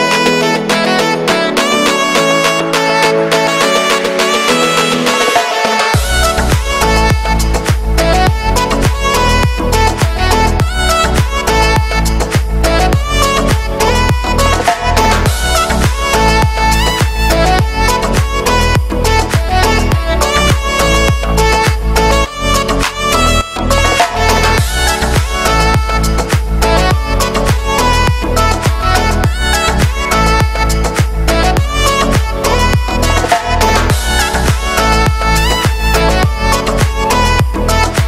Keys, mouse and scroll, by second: 1.3 middle click, 1.8 z, 2.8 middle click, 3.0 z, 3.1 shift+middle click, 3.5 a, 3.6 a, 3.8 scroll down 1, 4.0-5.1 shift+middle drag, 5.1-5.5 scroll up 4, 5.5 right click, 6.1 click, 6.9 right click, 7.1 g, 8.3 scroll down 2, 8.4 shift+middle click, 9.0 right click, 9.7 s, 11.2 click, 11.5 middle click, 11.9 right click, 12.3 g, 12.9 right click, 13.4 g, 14.1 right click, 14.5 g, 15.2 right click, 15.6 middle click, 15.8-16.2 scroll up 1, 16.2 middle click, 16.4-16.8 scroll up 1, 16.8 g, 17.3 scroll down 1, 17.5-19.5 shift+middle drag, 19.5-20.3 scroll up 1, 20.5 Tab, 21.1 right click, 21.4 middle click, 21.9 Tab, 22.6-23.8 drag, 23.8 right click, 24.3-24.8 scroll up 1, 26.4 shift+middle click, 26.9 scroll up 1, 27.0 ctrl+r, 28.9 shift+middle click, 29.2-29.5 scroll up 1, 29.5 ctrl+r, 31.6 middle click, 31.8 x, 32.2 scroll down 3, 32.3-33.3 shift+middle drag, 33.3 click, 33.4-33.8 scroll up 2, 33.8-35.6 alt+shift+right drag, 35.6 ctrl+z, 35.8 shift+right click, 36.0 shift+middle click, 36.4 scroll up 4, 36.6 e.